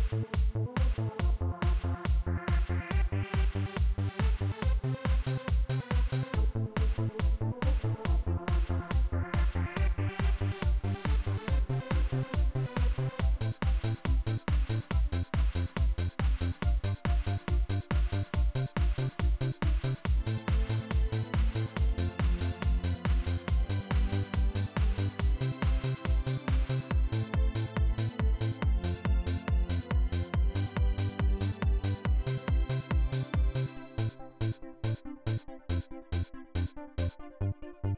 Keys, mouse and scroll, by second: 4.5 click, 7.8 click, 14.7-15.8 drag, 17.2 right click, 19.8-21.6 drag, 26.2-27.3 drag, 28.7 click, 32.0-33.3 drag, 35.9 right click, 36.4 right click, 37.2 click, 37.7 right click.